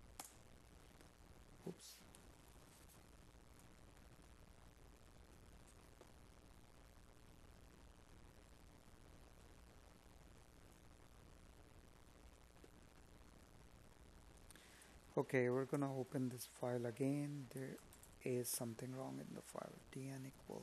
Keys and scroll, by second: 0.7 Up, 8.8 space, 10.4 Tab, 12.4 space, 15.9 space.